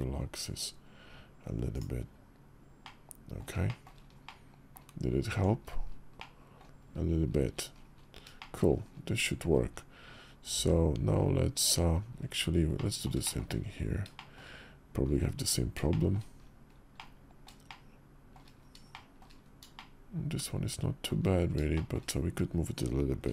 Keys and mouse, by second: 2.6 middle click, 3.4 shift+middle click, 4.0 middle click, 4.3 click, 5.1 Tab, 5.9-6.4 drag, 8.2 shift+click, 10.3 alt+x, 12.5 click, 13.0 shift+click, 13.9 shift+drag, 15.2 Tab, 15.6 shift+click, 16.7 click, 17.4 shift+click, 18.7 shift+click, 19.5-20.9 shift+drag, 21.5 shift+click, 23.0 b.